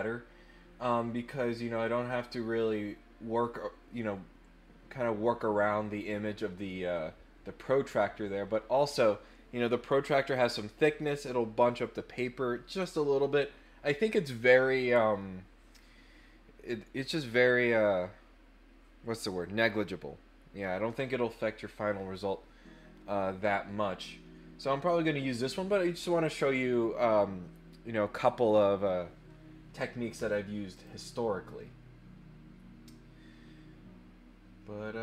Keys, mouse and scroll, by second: 30.7 click.